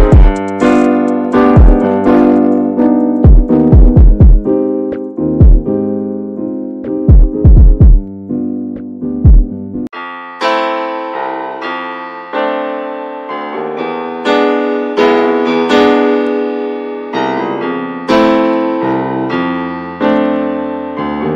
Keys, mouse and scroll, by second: 0.1 middle click, 0.3 scroll up 3, 0.4 shift+middle click, 0.6 shift+middle click, 0.8 shift+scroll up 1, 0.9 click, 1.3 middle click, 1.5 scroll up 1, 1.6 click, 2.0 middle click, 2.2 click, 2.3 shift+middle click, 2.5 click, 3.0 shift+middle click, 3.4 click, 3.7 middle click, 3.9 click, 4.1 shift+middle click, 4.4 click, 5.1 shift+middle click, 5.7 click, 6.3 shift+middle click, 6.4 click, 6.8 shift+middle click, 7.0 scroll up 1, 7.0 click, 7.4 shift+middle click, 7.7 click, 8.0 shift+middle click, 8.2 click, 8.7 middle click, 8.8 scroll down 3, 8.9 shift+middle click, 9.4-9.9 scroll up 2, 9.6 shift+middle click, 9.9 click, 10.3 middle click, 10.5-12.3 drag, 12.4 alt+shift+middle click, 12.7-14.0 scroll up 2, 12.9 shift+middle click, 14.0-15.4 drag, 15.4 scroll down 1, 15.5 scroll up 2, 15.7 shift+middle click, 15.9 ctrl+z, 17.9-20.5 drag, 20.5 scroll down 3, 20.7 shift+middle click, 21.2 scroll up 2, 21.3 shift+middle click.